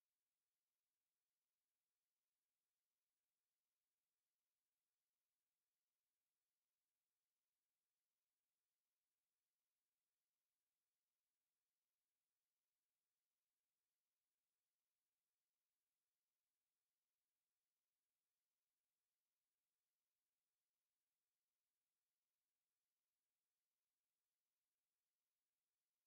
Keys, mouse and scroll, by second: 3.7 click, 5.6 click, 8.1-10.9 drag, 13.4-13.7 scroll down 2, 15.0-16.4 drag, 16.7 KP_1, 18.2 KP_2, 19.2 KP_1, 21.3 KP_2, 22.4 click, 23.6 click, 25.2 click.